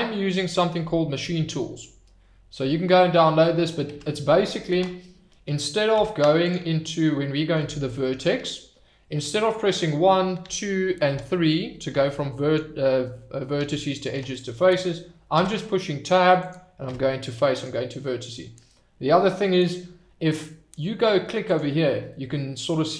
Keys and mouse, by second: 3.9 Tab, 7.3 click, 8.0 shift+click, 8.3 click, 10.4 2, 11.1 3, 11.9 1, 13.6 2, 14.1 3, 15.3 Tab, 16.8 Tab, 21.4 click, 22.1-22.9 middle drag.